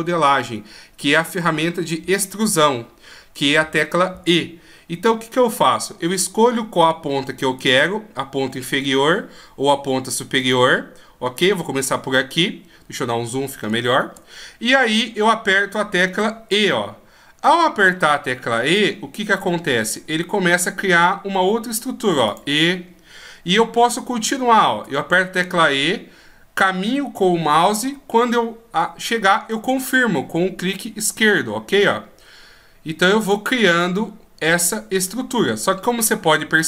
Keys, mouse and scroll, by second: 7.5 right click, 10.3 right click, 12.4-13.6 scroll up 3, 13.6-14.4 scroll up 2, 14.4 scroll up 2, 14.7-16.0 scroll down 4, 16.1 e, 24.7 e, 30.6-31.6 scroll down 1, 31.6 e, 33.7 middle click.